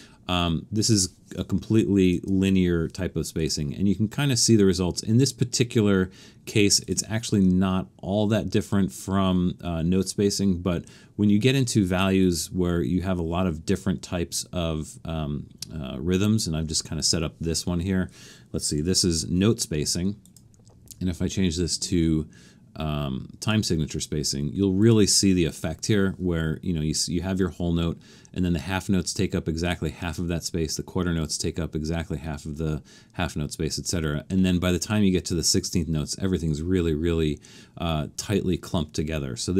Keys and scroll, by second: 19.0 4.